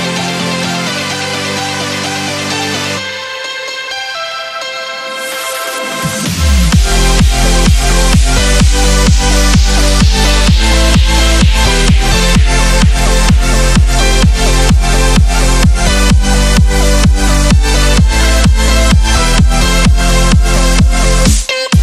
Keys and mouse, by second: 6.8 click, 11.6-15.2 drag, 17.9 Down, 20.7 click, 21.6 space.